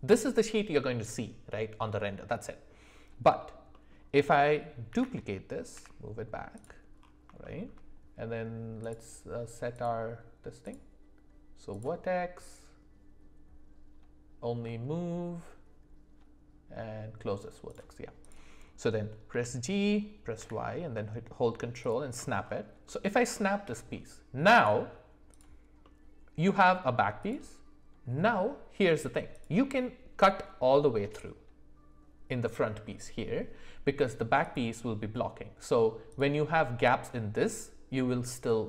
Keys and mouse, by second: 3.4 alt+middle click, 3.7 alt+middle click, 4.9 shift+d, 7.4 shift+middle click, 8.8-9.7 drag, 10.7-17.4 drag, 18.2 click, 19.3 g, 22.8-23.9 middle drag, 25.8-26.9 middle drag, 27.2 click.